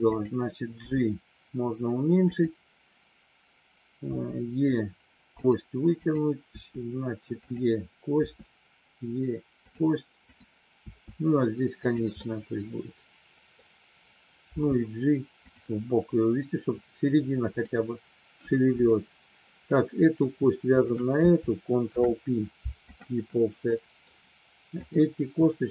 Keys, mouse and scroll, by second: 0.1 click, 0.8 g, 4.1 e, 5.3 click, 6.1 click, 6.5 e, 7.3 click, 8.2 e, 9.7 click, 10.2 click, 10.8 e, 11.8 click, 12.4-13.7 middle drag, 14.4 g, 15.4 click, 17.5 click, 18.7 click, 19.7 middle click, 20.8 shift+click, 21.9 ctrl+p, 23.8 middle click, 24.7 click.